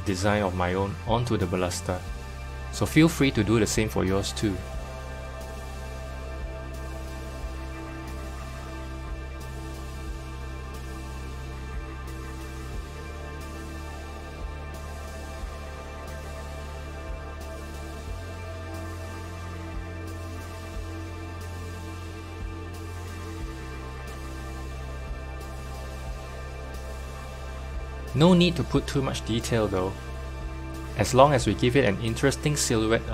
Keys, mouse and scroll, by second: 0.8 s, 6.4 click, 7.4 s, 15.2-17.8 middle drag, 16.1-17.2 scroll up 2, 17.2-17.8 scroll up 1, 17.8 alt+click, 18.8 1, 19.4 alt+click, 20.2 2, 20.6 alt+click, 22.2 alt+shift+click, 23.6 s, 26.9-28.1 middle drag, 28.1-28.5 scroll down 2, 28.5-31.2 middle drag, 31.2 Tab, 32.0-33.1 middle drag.